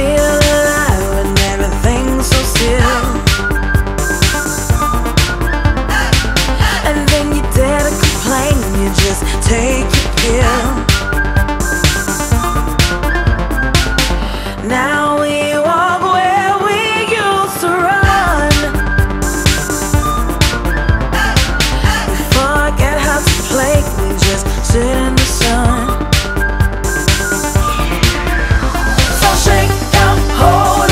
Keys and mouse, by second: 0.7 click, 2.4-4.0 typing, 2.7 click, 7.0 click, 8.0 click, 10.4 click, 10.5 double click, 10.6 click, 10.9 double click, 11.0 click, 11.2 double click, 11.3 click, 11.5 double click, 11.6 double click, 12.6 click, 13.1 double click, 13.7 click, 14.9 click, 15.3 double click, 15.4 click, 15.6 double click, 15.7 click, 16.9 click, 19.0 click, 21.9 click, 25.5 click, 26.5 click.